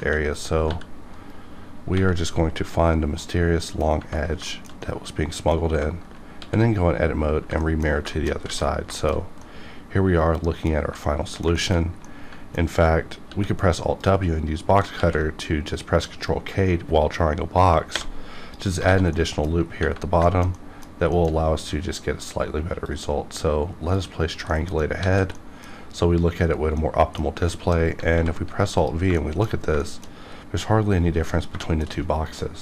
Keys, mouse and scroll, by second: 0.3 click, 0.7 g, 1.1 right click, 1.9 x, 2.6 click, 3.0 scroll down 1, 3.2 middle click, 4.2 scroll down 1, 4.5 shift+middle click, 4.8 middle click, 6.4 alt+x, 7.6 middle click, 8.1 shift+middle click, 8.5 alt+a, 8.7 scroll down 1, 8.9 shift+middle click, 9.4-10.8 middle drag, 11.0 middle click, 11.6 shift+middle click, 11.8 scroll up 2, 12.0 scroll down 1, 12.0 middle click, 13.3 alt+w, 14.0 click, 15.0 ctrl+x, 18.9 alt+a, 19.1 middle click, 20.3 shift+middle click, 20.6 middle click, 21.1 shift+middle click, 22.9-24.5 drag, 24.5 middle click, 25.2 alt+a, 25.4 middle click, 27.5 shift+middle click, 28.1 alt+v, 28.8 click, 29.2 shift+middle click, 29.5 shift+scroll down 1, 29.8 shift+middle click, 31.6 shift+middle click.